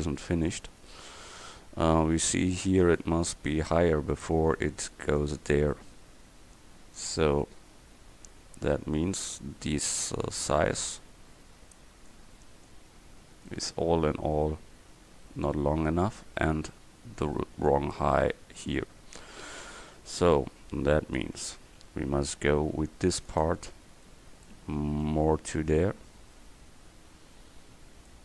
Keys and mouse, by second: 5.3 Tab, 7.1 Tab, 7.7 Tab, 8.3 Tab, 19.1 Tab, 21.4 a, 21.8 c.